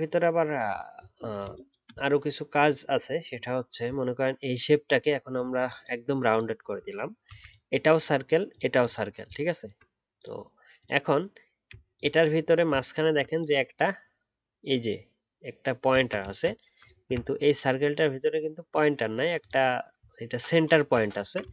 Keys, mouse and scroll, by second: 12.9-15.9 alt+scroll up 1, 15.9-16.4 alt+scroll down 1, 17.2 alt+scroll up 2, 20.1-20.6 alt+scroll down 1, 20.6 alt+scroll up 1, 21.1 alt+scroll down 4.